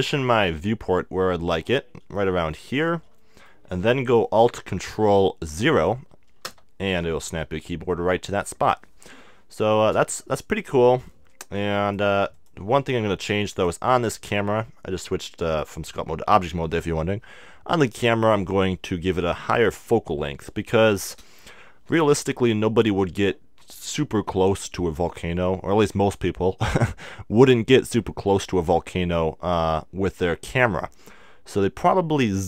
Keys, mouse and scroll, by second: 2.2-5.1 middle drag, 6.4 ctrl+alt+KP_0, 11.9-13.8 drag, 13.5 middle click, 13.5-15.3 right drag, 15.5-20.0 drag.